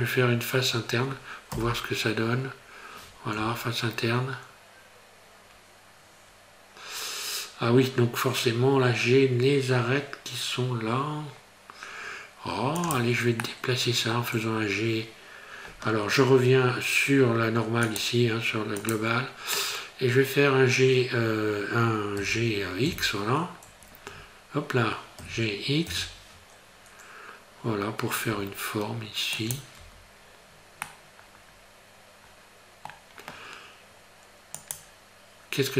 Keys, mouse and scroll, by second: 0.0 scroll up 2, 0.3 scroll down 1, 1.6 i, 13.5 middle click, 17.9 click, 22.9 x, 25.2 g, 29.8 Tab, 30.3 scroll down 2, 30.9 middle click, 34.6 click.